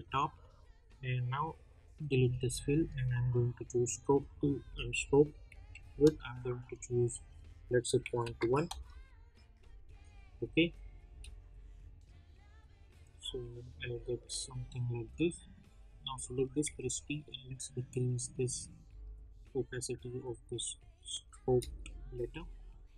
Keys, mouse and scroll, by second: 7.1-8.7 drag, 8.7 \, 9.6 click, 11.0 space, 15.0 space, 15.7 click, 16.1-16.6 scroll up 1, 16.6 t, 17.4-21.4 drag, 21.4 space.